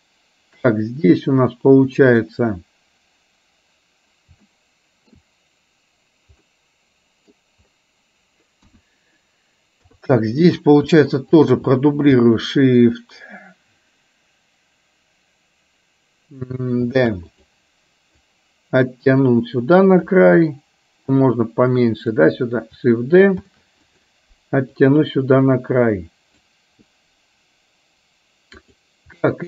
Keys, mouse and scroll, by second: 2.1 click, 4.4 shift+middle click, 6.6 middle click, 8.7 KP_1, 9.9 KP_3, 11.4 shift+click, 17.3 shift+d, 18.2-20.3 drag, 21.1-22.2 drag, 23.4 shift+d, 24.8-26.6 drag, 28.6 click.